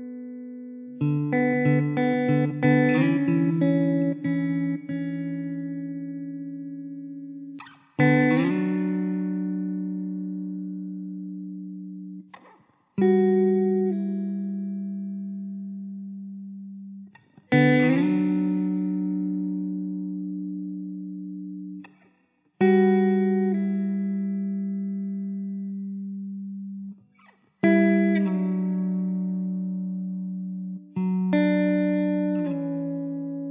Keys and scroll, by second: 0.8 Tab, 1.8 h, 2.2 ctrl+z, 3.4 g, 5.3 g, 7.1 Tab, 8.5 shift+d, 12.8 Tab, 13.5 g, 15.3 Tab, 20.0 shift+d, 21.8 s, 24.0 shift+d, 26.7 s, 31.1 shift+d.